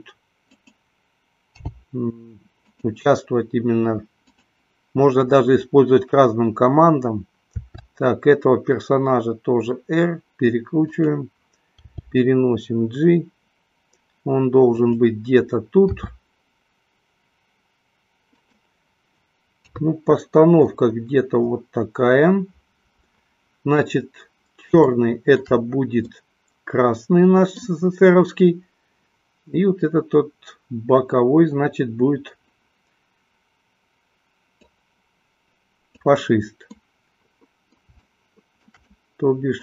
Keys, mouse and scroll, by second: 1.1 click, 2.1 g, 3.1 drag, 4.3-4.9 drag, 7.7 r, 11.2 click, 12.2 g, 15.1 click, 16.2 r, 19.8 KP_3, 24.9 shift+middle click, 26.2-27.8 middle drag, 34.6-36.3 drag, 36.9-39.6 middle drag.